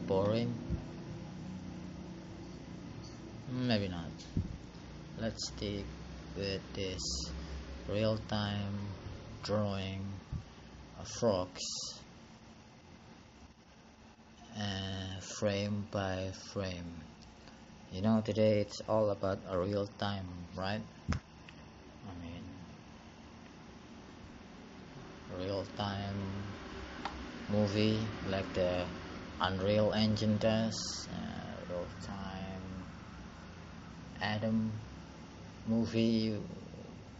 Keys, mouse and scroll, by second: 1.4 click, 3.3 click, 25.8 click, 26.5 click.